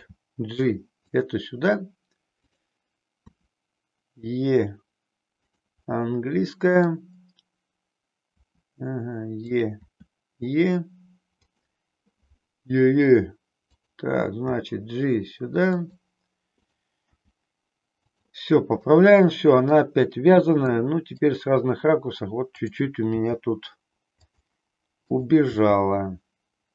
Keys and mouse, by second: 2.4 click, 3.3 e, 5.9-6.9 middle drag, 8.3 e, 9.8 e, 13.7 click, 14.5 g, 16.5 click, 17.1 g, 18.9 middle click, 20.7 middle click, 23.1 g, 25.7 g.